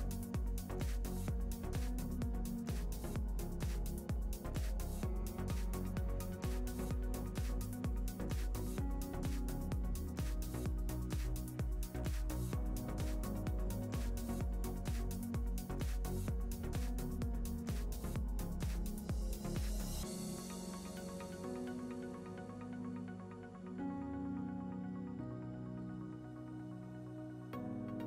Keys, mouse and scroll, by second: 3.0 middle click, 3.4 scroll up 2, 3.6 click, 5.0 click, 5.0-5.5 scroll down 2, 6.3-7.4 middle drag, 7.4 click, 8.5 middle click, 9.3 click, 10.5 shift+click, 10.8 click, 13.1 scroll up 1, 13.2 shift+middle click, 13.5 click, 15.3 shift+middle click, 15.9 click, 19.0-22.8 shift+middle drag, 19.1-19.4 scroll up 1, 21.5 scroll down 2, 21.8 click, 22.5-22.8 scroll down 2, 22.8 z, 25.2 z, 27.0-28.0 middle drag, 27.7 scroll down 2.